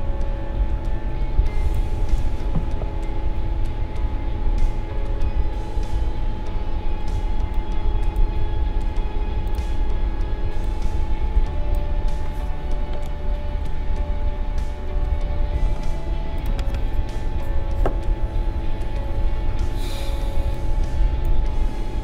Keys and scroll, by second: 12.9 Down.